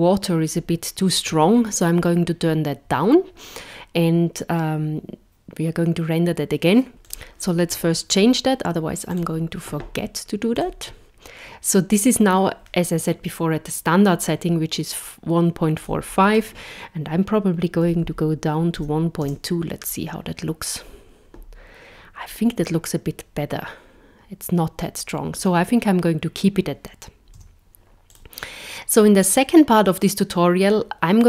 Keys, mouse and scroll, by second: 7.0 click, 9.1 click, 10.6 click, 15.8 click, 27.4 z.